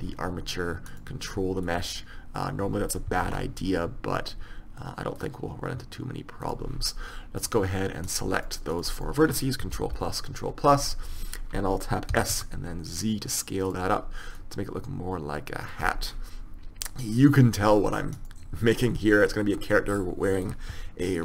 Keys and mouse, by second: 0.0-3.0 drag, 3.4 ctrl+r, 7.5-9.3 drag, 8.2-9.3 middle drag, 9.3 right click, 9.9 ctrl+KP_Add, 12.3 s, 15.7 click, 18.3-20.1 drag, 20.1-21.2 middle drag.